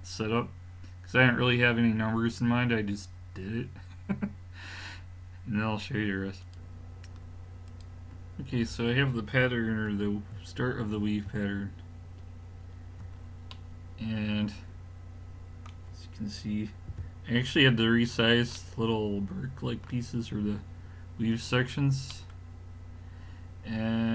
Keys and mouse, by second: 10.3-12.1 middle drag, 16.9 KP_5, 17.7 middle click, 19.3-19.7 middle drag, 20.3-21.4 middle drag.